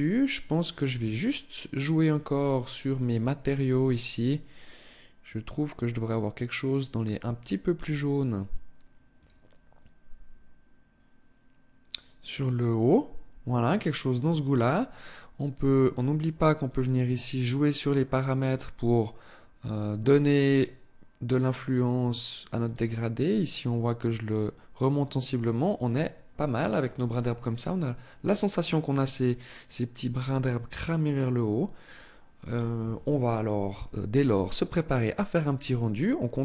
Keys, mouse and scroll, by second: 1.5 click, 31.4 click, 35.2 click.